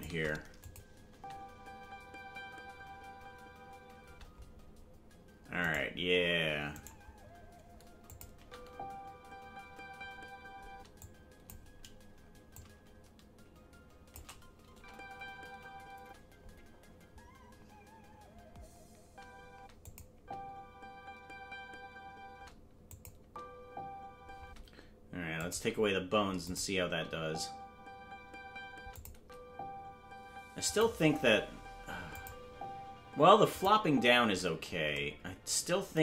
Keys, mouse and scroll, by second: 0.6 click, 1.1 space, 5.8 right click, 5.8 space, 8.1 click, 8.1 right click, 8.3 space, 11.0 space, 11.0 click, 12.5-14.2 drag, 14.7 space, 19.8 click, 19.8 space, 20.1 space, 22.9 click, 22.9 space, 23.2 space, 24.8 space, 25.4 click, 26.4 click, 26.8 space, 28.9 click, 28.9 space, 29.1 space, 30.7 click, 32.2 click, 33.5 click, 34.2 space.